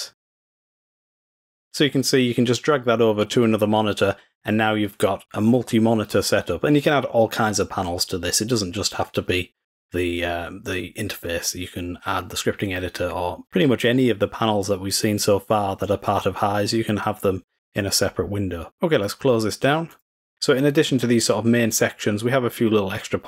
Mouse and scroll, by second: 1.6 click.